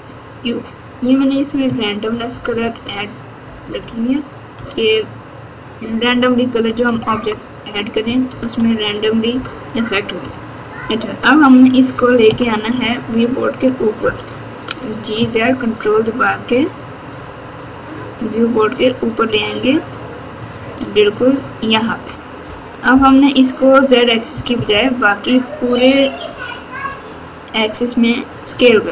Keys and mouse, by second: 2.1 ctrl+KP_2, 2.3 ctrl+KP_2, 2.4 ctrl+KP_2, 3.4 KP_4, 3.6 KP_4, 3.9 KP_4, 4.5 KP_8, 5.8 KP_8, 6.8 KP_2, 7.0 KP_2, 8.5 KP_8, 9.3 KP_4, 10.2 KP_6, 12.2 KP_1, 13.9 g, 22.9 KP_7, 24.3 KP_2, 24.5 KP_2.